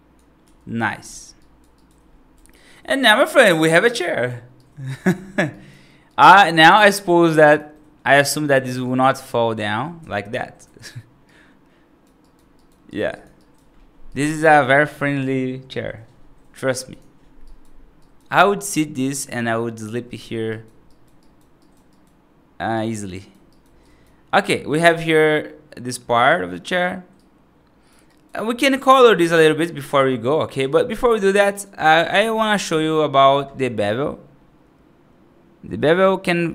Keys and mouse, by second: 0.3 g, 1.2 right click, 1.6 right click, 2.2 F2, 2.4 right drag, 2.9-4.1 right drag, 4.4-4.8 right drag, 5.1 middle drag, 5.4 right drag, 5.9 right drag, 6.3 right drag, 6.7 right drag, 7.3 right drag, 7.6 middle drag, 8.0 right drag, 8.7 F2, 9.3-9.6 middle drag, 9.8 r, 11.1-11.9 right drag, 12.1 right drag, 12.4 right drag, 12.7 right drag, 13.2 right drag, 14.0 right click, 16.5 right click, 16.8 click, 17.3 right drag, 17.9 right drag, 20.0 F2, 20.4 right drag, 20.7 right drag, 21.1 right drag, 21.5 right drag, 21.8 right drag, 22.6 right drag, 23.0 right drag, 23.4 right drag, 23.7 right drag, 24.2 F3, 24.6-26.4 right drag, 27.0 right click, 28.0 right click, 28.6 right click, 29.0 middle click, 30.5 click, 31.0 1, 31.4 click, 32.6 1.